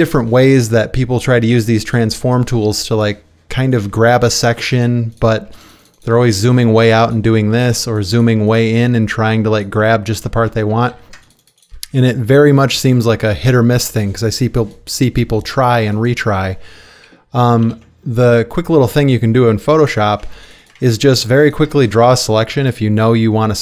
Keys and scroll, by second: 5.5 space, 7.5 space, 7.8 space, 10.1 ctrl+space, 10.9 ctrl+d, 11.1 ctrl+space, 11.9 space, 17.6 ctrl+d, 20.2 space.